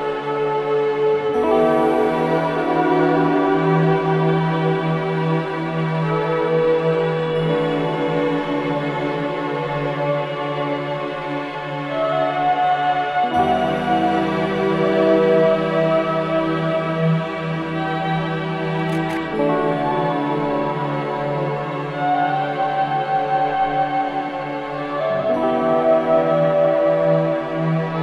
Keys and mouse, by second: 8.4-9.4 drag, 9.4-9.9 typing, 10.9-12.4 drag, 12.2-13.4 typing, 14.9-26.5 drag, 27.2-28.0 drag.